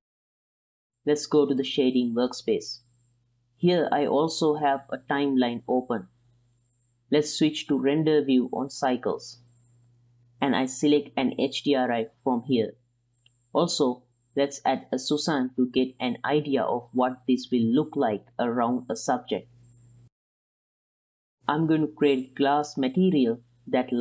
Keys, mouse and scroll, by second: 1.1 ctrl+s, 1.7 click, 2.6 click, 5.0 Home, 6.9 alt+a, 9.9-12.8 drag, 16.2-16.7 middle drag, 17.0 r, 17.8-18.2 middle drag, 18.5 shift+middle click, 18.7 middle click, 19.7 middle click, 20.2 click, 20.9 click, 21.7 click, 22.6-23.9 drag.